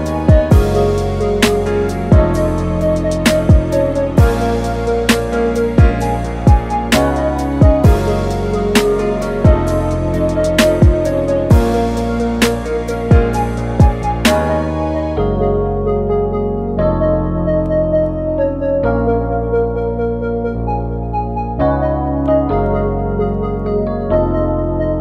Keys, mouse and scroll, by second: 0.1 scroll up 1, 0.2-0.6 middle drag, 0.6-1.1 scroll up 4, 1.1 click, 1.7-2.1 middle drag, 3.0-3.8 middle drag, 3.8 click, 4.0-5.0 scroll down 14, 5.0-6.5 drag, 7.8-9.3 middle drag, 9.4 drag, 9.6-10.0 scroll up 2, 10.0 click, 10.4-11.2 scroll up 2, 11.2 click, 11.6-12.1 middle drag, 12.1 shift+a, 13.4 s, 14.4 alt+g, 17.5 s, 18.8 alt+g, 19.1-20.0 middle drag, 20.0 ctrl+b.